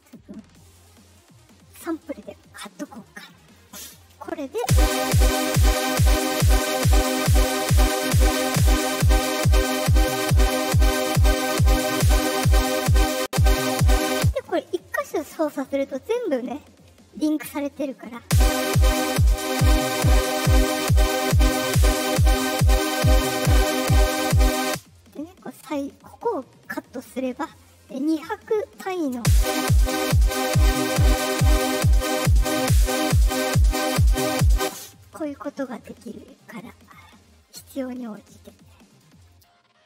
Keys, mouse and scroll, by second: 3.5 right click, 4.5 space, 7.3 middle click, 8.4 click, 8.6 click, 10.8 right click, 12.6 middle click, 14.1 space, 18.1 space, 18.2 ,, 18.6-24.5 drag, 24.5 space, 25.7 right click, 26.6 click, 28.5-33.1 drag, 29.1 space, 34.5 space, 36.6 right click, 38.5 right click, 39.2 right click.